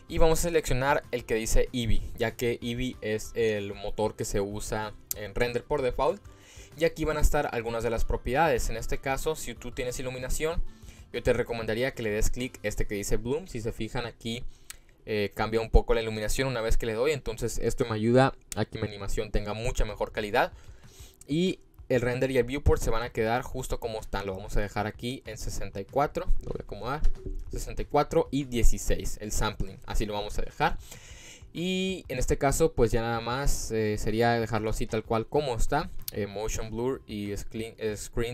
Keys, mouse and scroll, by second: 10.6 click, 11.4 click, 12.1 click, 15.0 click, 15.6 click, 16.3 click, 17.1 click, 20.2 click, 20.9 click, 23.2-25.7 drag, 26.1 click, 32.6 click, 33.7 click, 36.5 click, 36.9 click, 37.7 click.